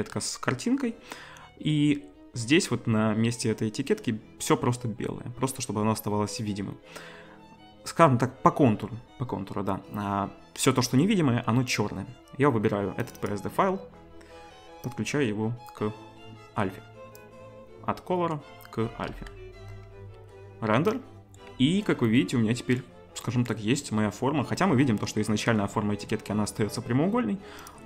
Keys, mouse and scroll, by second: 13.4-14.9 drag, 19.1 z, 27.7-27.8 drag.